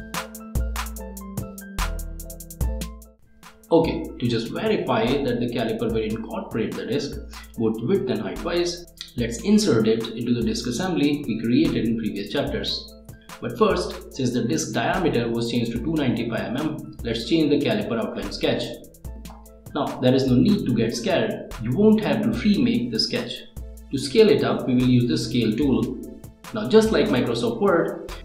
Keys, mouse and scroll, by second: 0.0 middle click, 0.2 space, 0.4 click, 0.9 scroll up 1, 1.6 middle click, 23.8 click, 23.9 click, 25.4 click, 25.9-28.2 right drag.